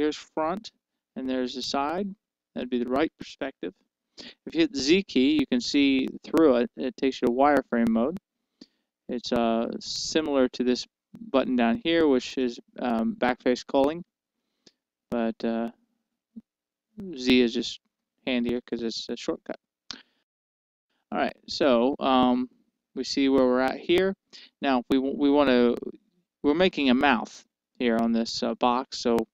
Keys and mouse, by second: 1.2 KP_1, 2.3 KP_3, 6.4 z, 10.4 z, 13.3-15.2 drag, 16.2-18.3 drag, 19.0 z, 19.6 z, 23.6 z.